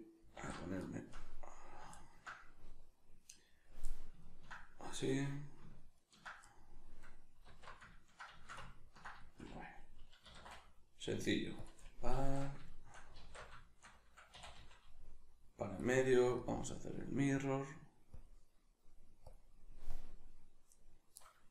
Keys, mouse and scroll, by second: 0.4 alt+q, 0.9-5.0 shift+middle drag, 5.0 right click, 6.0 ctrl+right click, 6.4-11.7 middle drag, 7.5 alt+q, 10.2 e, 11.7 click, 12.2 alt+q, 12.7-14.4 shift+middle drag, 13.2 alt+q, 14.4 e, 15.8 click.